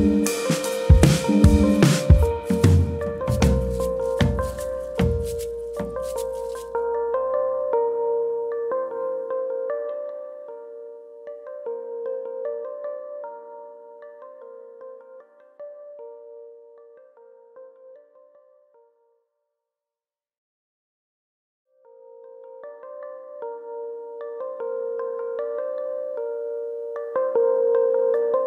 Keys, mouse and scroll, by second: 0.0 shift+middle click, 0.7 middle click, 0.7-1.4 scroll up 2, 1.4 middle click, 1.5 shift+middle click, 2.3 3, 2.8 click, 3.1 middle click, 3.6 shift+middle click, 3.9 shift+middle click, 3.9 middle click, 4.5 click, 5.3 middle click, 5.7 click, 6.2 shift+click, 6.4 middle click, 7.1 click, 8.3 middle click, 8.6-9.0 scroll down 4, 9.0 middle click, 9.4 Tab, 9.7 middle click, 10.0 scroll down 2, 10.3 middle click, 11.2-11.8 scroll down 3, 12.1 KP_Divide, 12.6-13.0 scroll down 2, 13.0 middle click, 13.4-13.8 scroll down 2, 14.0 shift+middle click, 14.3-15.0 scroll up 6, 15.0 middle click, 15.7 click, 16.0 Tab, 16.4 middle click, 17.0 middle click, 17.3-18.0 scroll up 1, 18.0 scroll up 1, 18.3 2, 18.7 alt+click, 19.4 ctrl+e, 20.5-21.2 scroll down 3, 20.9 middle click, 21.2 shift+middle click, 21.5-21.8 scroll down 2, 21.7 Tab, 22.0 shift+middle click, 22.2-22.7 scroll up 2, 22.5 click, 22.7 Tab, 23.0 middle click, 23.3 scroll up 1, 23.6 middle click, 23.9 shift+middle click, 24.8 middle click, 25.1 shift+middle click, 25.4 middle click, 25.7 scroll up 2, 25.9 shift+middle click, 26.5 alt+click, 27.3 ctrl+e.